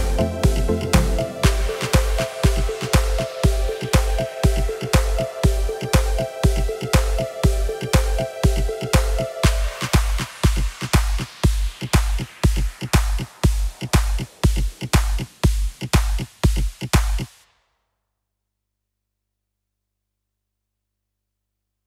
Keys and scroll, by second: 4.7 Tab, 6.5 g, 7.0 z.